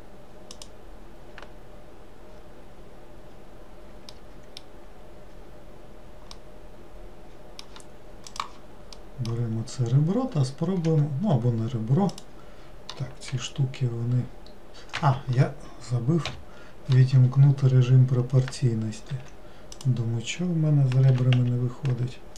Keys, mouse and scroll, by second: 4.2-9.7 middle drag, 9.7-10.9 scroll up 4, 10.9 1, 12.2 click, 17.5-17.9 scroll down 2, 19.2 2, 19.8 click.